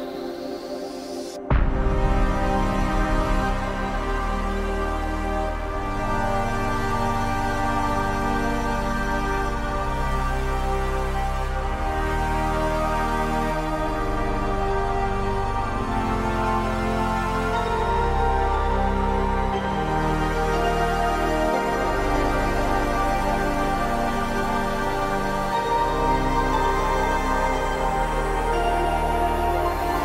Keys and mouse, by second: 0.2 click, 0.5 ctrl+z, 0.7 ctrl+z, 0.9 click, 8.9 click, 9.6 click, 10.4-11.7 drag, 12.7 ctrl+z, 12.8-16.3 typing, 13.0 click, 13.3 ctrl+z, 13.5 click, 14.1 ctrl+z, 14.3 click, 14.7 ctrl+z, 15.0 click, 15.3 click, 16.0 click, 16.4 click, 17.0 ctrl+z, 17.1 ctrl+z, 17.3 ctrl+z, 17.5 ], 17.6 ], 17.7 click, 18.1 ctrl+z, 18.1 ], 18.3 click, 18.7 click, 19.3 ctrl+z, 19.3-20.1 typing, 19.7 click, 20.1 ctrl+z, 20.2 click, 22.6 ], 22.7 click, 23.1 ctrl+z, 23.1 ], 23.2 click, 23.5-24.1 [, 24.2 click, 24.4 ctrl+z, 24.5 ], 24.6-25.6 drag, 26.0 ctrl+z, 26.2 ctrl+z, 26.4 [, 26.4-27.6 drag, 27.6-29.7 typing, 27.7 click, 28.1 ctrl+z, 28.4 ctrl+z, 28.5 click, 29.3 ctrl+z, 29.5 click, 29.9 click.